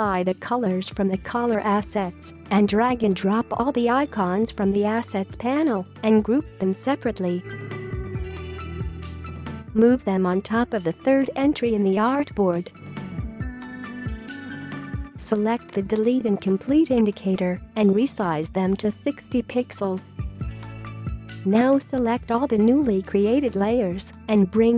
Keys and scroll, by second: 4.4 ctrl+g, 6.9 ctrl+g, 9.1 ctrl+g, 9.4 space, 9.7 space, 11.4 space, 15.3 space, 18.1-19.0 typing, 21.3 space.